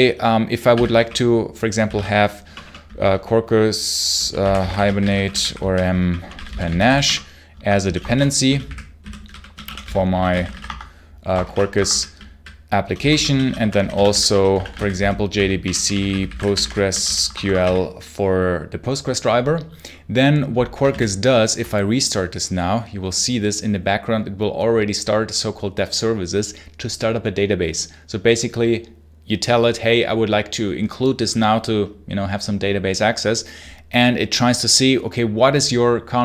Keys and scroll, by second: 0.0-2.3 typing, 3.8-18.0 typing, 7.4 Escape, 11.3 ctrl+shift+o, 11.6 Escape, 20.8 super+h.